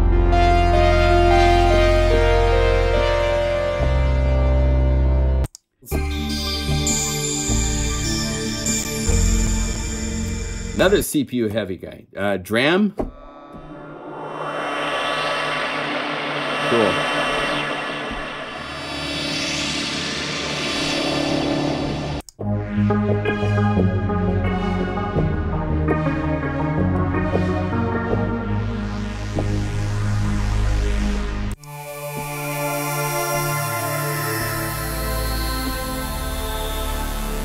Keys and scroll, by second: 0.0 F4, 0.4 F4, 1.1 F4, 9.0 F1, 9.3 F2, 13.5 F4, 18.0 F4, 32.1 F4.